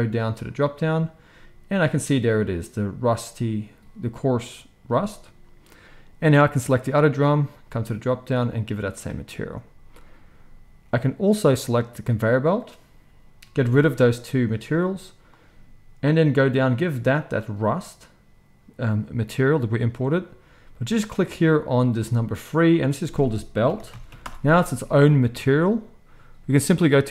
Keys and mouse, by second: 0.3-6.6 drag, 6.6-7.7 middle drag, 7.7-11.7 drag, 11.7-13.9 middle drag, 13.9-27.1 drag.